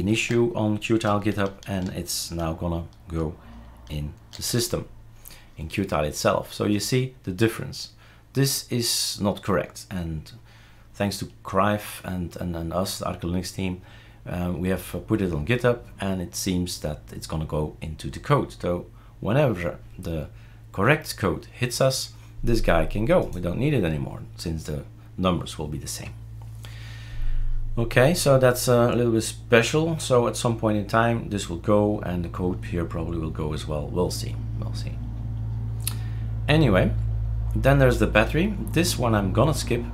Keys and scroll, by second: 0.1 ctrl+s, 4.4 shift+super+r.